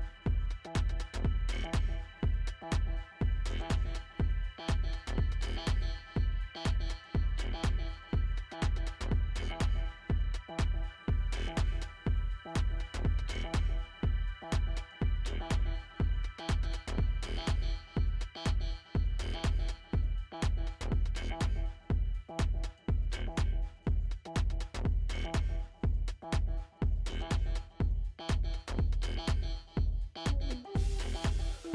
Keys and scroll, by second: 4.8 ctrl+space, 18.2 ctrl+space, 27.5 Delete, 29.1 ctrl+0.